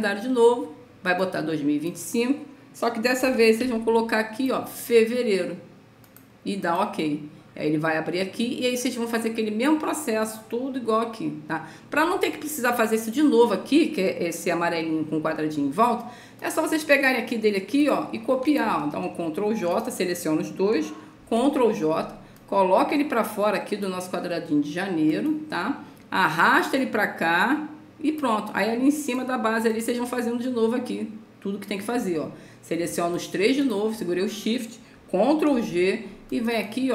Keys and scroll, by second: 3.5 BackSpace, 3.6 5, 21.5 ctrl+j, 35.8 ctrl+g.